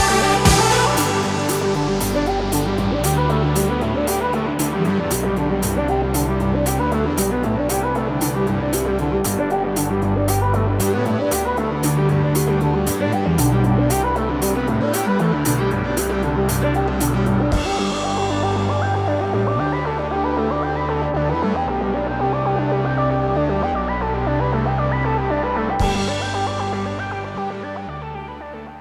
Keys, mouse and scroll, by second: 0.7 shift+click, 1.6 click, 3.5 click, 3.7 super+s, 7.8 click, 8.6 super+z, 8.9 super+z, 9.5 n, 9.9 n, 10.1 n, 11.3 super+click, 11.3 super+z, 12.6 super+click, 13.1 n, 14.2 click, 15.3 super+s, 16.0 click, 16.5 h, 17.8 super+a, 18.7 h, 19.9 click, 19.9 h, 20.8 Tab, 21.0 Tab, 21.3 Tab, 22.0 Tab, 22.3 Tab, 23.5 Tab, 23.9 n.